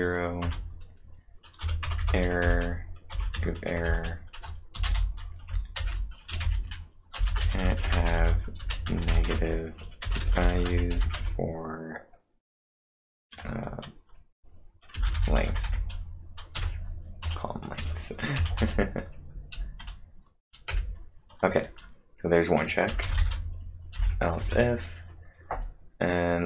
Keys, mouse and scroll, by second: 0.0-0.1 typing, 0.4 Return, 1.4-11.3 typing, 14.7-16.6 typing, 17.8-18.7 typing, 20.5-21.2 typing, 24.4 space.